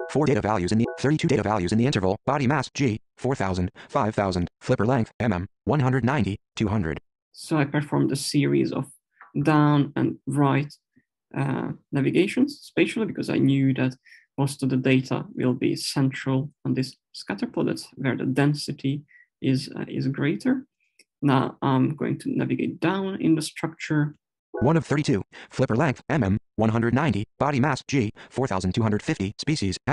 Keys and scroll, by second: 24.3 Down.